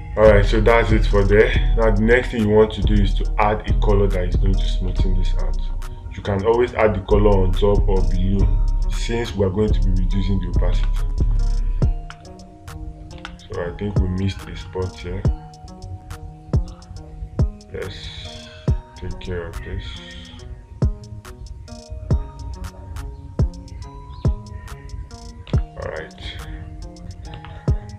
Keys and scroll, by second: 1.0 space, 5.4 space, 11.2 space, 13.6 space, 25.9 space.